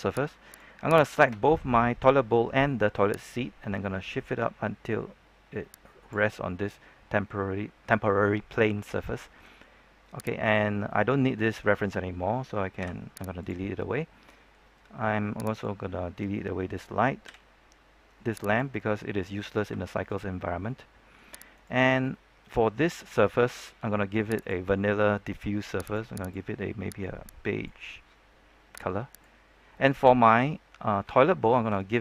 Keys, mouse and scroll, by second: 0.4 right click, 1.1 shift+right click, 3.2-6.1 drag, 6.3 scroll down 1, 6.6 middle click, 7.5-8.7 scroll up 1, 8.8 shift+middle click, 10.0-10.4 scroll up 1, 10.4 right click, 10.8-12.2 middle drag, 12.7 x, 13.3 click, 13.7 scroll down 1, 13.9 middle click, 14.5-15.5 scroll up 1, 15.5 right click, 17.2 x, 18.4 click, 19.7 shift+middle click, 20.2-20.6 scroll up 1, 20.6 middle click, 21.5 right click, 22.0 shift+middle click, 24.3-28.4 drag, 29.0 right click, 29.7 middle click, 30.6-31.0 scroll up 1, 31.1 shift+middle click, 31.8-32.0 scroll up 1.